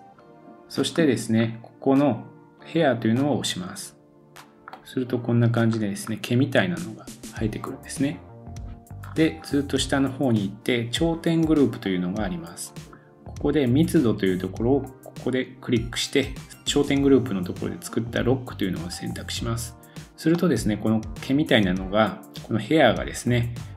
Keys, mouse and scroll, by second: 0.0-1.4 middle drag, 0.1-0.9 scroll down 7, 0.9-2.5 scroll up 4, 3.8 click, 4.7-11.8 middle drag, 5.7-6.1 scroll up 2, 6.4-7.8 scroll down 1, 7.8-8.7 scroll down 1, 9.0 scroll down 2, 11.8-23.7 drag, 11.8-12.5 scroll down 2, 12.7-14.8 scroll down 2, 20.3 middle click.